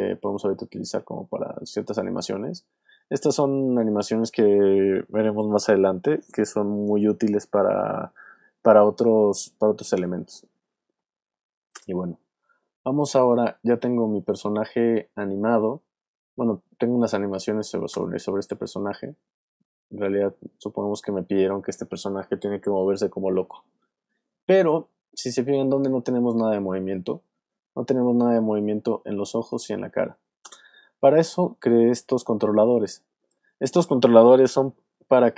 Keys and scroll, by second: 11.7 space, 12.3 alt+space, 13.2 alt+space, 14.1 space, 17.9 space, 30.4 space.